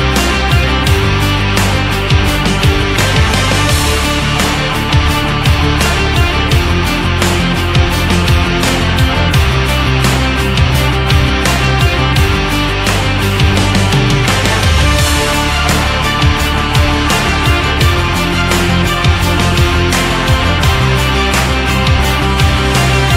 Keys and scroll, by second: 5.0 ctrl+z.